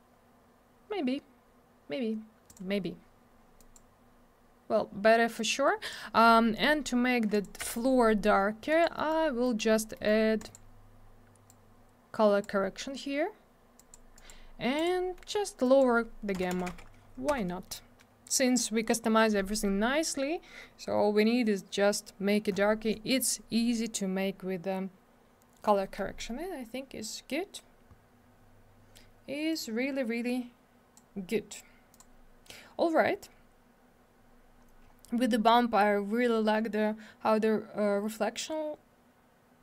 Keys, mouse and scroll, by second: 2.5 click, 2.6 click, 3.6 click, 3.7 click, 5.4 click, 7.3 click, 7.4 click, 7.6 m, 8.7 click, 8.8 click, 9.0 middle click, 9.1 middle click, 9.2 scroll down 1, 9.4 middle click, 9.6 double middle click, 9.7 scroll up 1, 10.0 middle click, 10.1 middle click, 10.4 click, 10.5 double click, 11.5 click, 13.8 click, 13.9 click, 14.2 click, 14.3 double click, 14.8 click, 14.8 click, 15.7 click, 15.8 click, 16.4 0, 17.3 Return, 29.5 click, 31.9 click, 32.0 click, 33.2 scroll up 1, 34.6-35.7 scroll down 1.